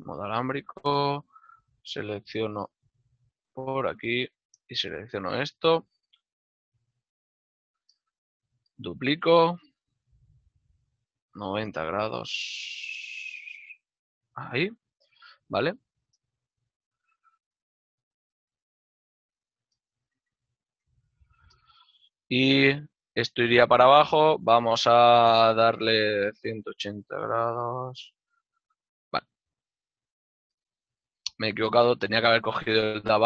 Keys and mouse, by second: 9.1 click, 11.8 z, 12.4 KP_Subtract, 14.5 Return, 14.5 KP_Enter, 15.5 ctrl+middle click, 18.9 5, 19.5 click, 24.8 shift+middle click, 30.2-31.0 typing, 31.1 Escape.